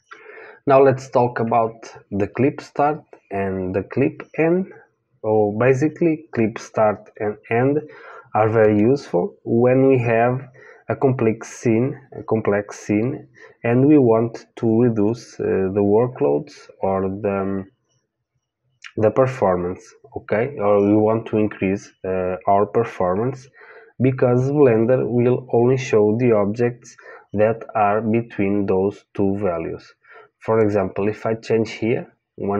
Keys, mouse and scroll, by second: 30.6-32.5 drag.